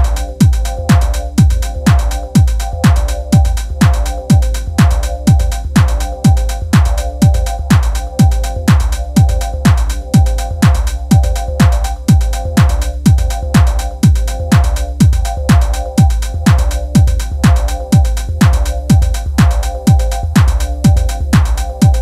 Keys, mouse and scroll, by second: 0.0-9.7 typing, 0.2 click, 0.3 middle click, 0.5 middle click, 1.1 click, 1.2 middle click, 1.5 middle click, 2.0 click, 2.1 middle click, 2.3 shift+click, 2.4 alt+m, 2.6 middle click, 2.8 click, 3.1 shift+middle click, 3.4 click, 3.8 shift+middle click, 4.2 click, 4.3 middle click, 4.6 shift+click, 5.0 middle click, 5.2 shift+middle click, 5.4 click, 6.1 shift+click, 6.3 alt+m, 6.6 click, 6.7 middle click, 7.0 shift+click, 7.1 click, 7.3 shift+click, 7.5 click, 7.6 shift+click, 7.8 shift+middle click, 7.9 shift+click, 8.2 shift+middle click, 8.3 shift+click, 8.4 middle click, 8.9 Tab, 9.0 middle click, 9.3 Tab, 9.6 middle click, 10.0 Tab, 10.1 middle click, 10.7 scroll down 2, 10.7 middle click, 10.9 scroll up 1, 10.9 shift+middle click, 11.2 ctrl+s, 11.6 middle click, 11.8 Tab, 11.9 middle click, 12.0 KP_3, 12.2 a, 12.3 a, 12.4 b, 13.8 shift+middle click, 13.9-14.2 scroll up 1, 14.2 b, 14.9 Tab, 15.0 scroll down 3, 15.0 shift+middle click, 15.6 click, 15.8-17.0 middle drag, 17.7 click, 17.7 middle click, 18.1 scroll up 3, 18.2 middle click, 18.3 Tab, 18.4 2, 18.7 shift+click, 18.9 shift+click, 19.0 middle click, 19.2 shift+click, 19.4 shift+middle click, 19.6 shift+click, 19.8 shift+click, 20.3 shift+middle click, 20.5 alt+shift+click, 20.7 scroll down 1, 20.7 shift+middle click, 21.1 scroll up 1, 21.2 alt+shift+click, 21.4 shift+click, 21.5 shift+middle click.